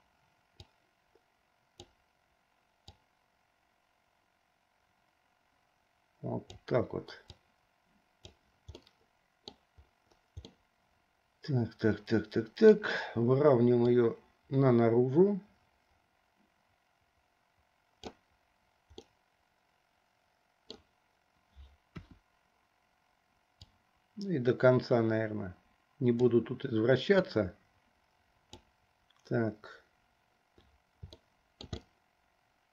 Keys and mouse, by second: 0.9-2.0 drag, 3.0-6.7 drag, 7.5-8.5 drag, 8.9 middle click, 10.7-13.0 middle drag, 14.1-19.1 drag, 19.1-20.9 middle drag, 22.0 KP_1, 23.7 click, 25.4 click, 27.4-28.9 drag, 31.3 shift+middle click, 32.0-32.7 middle drag.